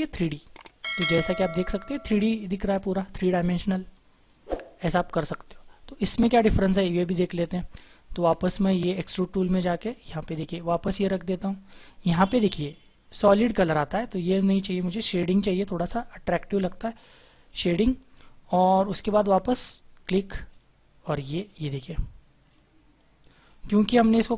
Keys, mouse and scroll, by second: 20.5 double click.